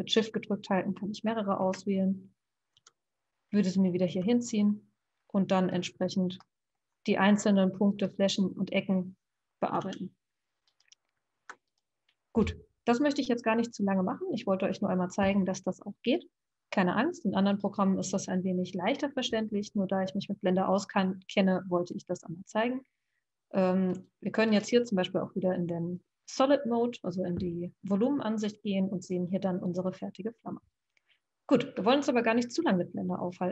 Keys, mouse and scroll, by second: 1.6 KP_1, 2.7 e, 4.0 g, 6.4-7.9 middle drag, 7.9 click, 9.8 g, 11.3 Escape, 11.7 click, 23.9 click, 24.4 click.